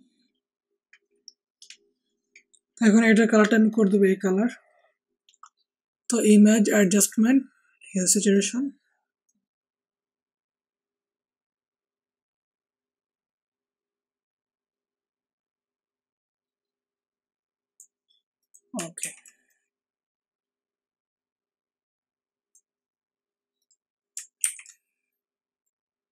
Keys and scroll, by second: 18.9 ctrl+t, 24.4 ctrl+t.